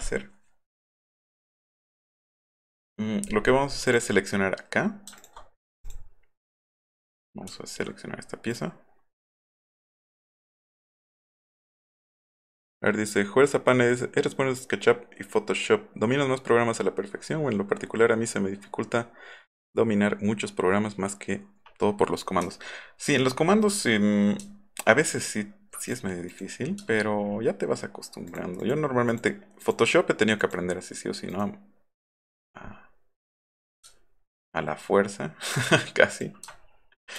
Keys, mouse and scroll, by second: 3.9 click, 7.5 alt+scroll up 2, 8.5 click, 10.3 click, 11.0 click, 22.6 alt+scroll up 1, 22.9 alt+scroll down 1, 23.2 alt+scroll up 2, 24.5 scroll up 2, 24.7-25.1 scroll down 4, 25.9 click, 26.3 click, 26.9-27.3 alt+scroll up 4, 28.3 click, 28.6 click, 29.1 click, 29.6 click, 30.4 click, 31.3 right click, 32.3 right click, 33.9-34.2 alt+scroll up 4, 35.6-36.2 ctrl+drag, 36.5 alt+scroll up 1.